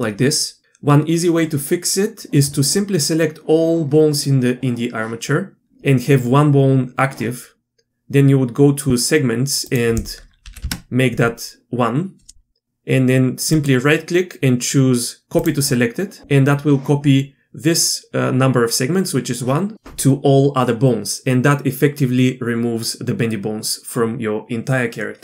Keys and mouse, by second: 9.8-11.5 drag, 13.5-15.5 right drag.